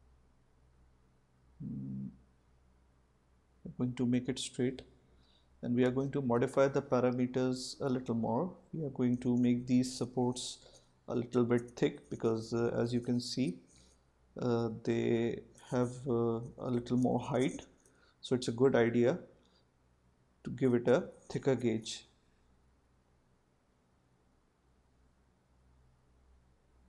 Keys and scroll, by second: 6.0 Return, 14.8 Return, 20.4 5, 20.8 Return, 24.5 Return.